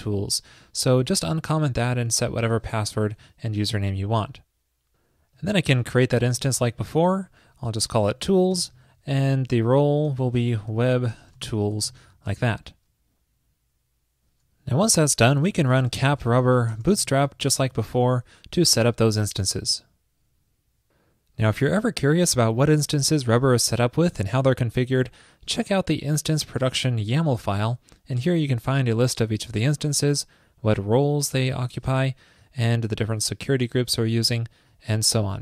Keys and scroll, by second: 0.4 super+/, 2.9 super+s, 6.4 ctrl+a, 6.8 alt+Right, 7.2 alt+Right, 7.9 alt+BackSpace, 9.0 alt+Right, 9.2 alt+Right.